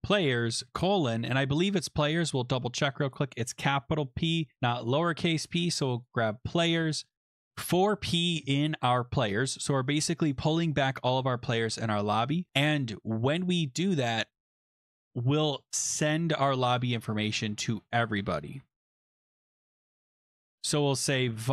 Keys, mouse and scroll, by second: 0.0-0.9 typing, 2.1 click, 3.0 click, 3.1 click, 3.7 ctrl+c, 4.4 click, 5.3 click, 5.5 click, 5.5 ctrl+v, 6.0 click, 20.7-21.5 typing.